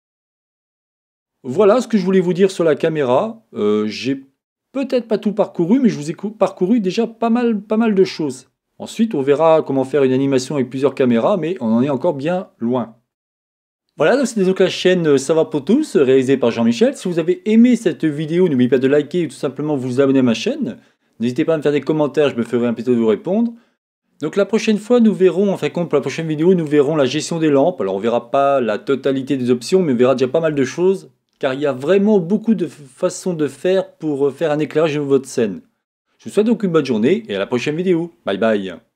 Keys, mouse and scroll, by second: 1.8-3.4 middle drag, 9.8-11.5 middle drag.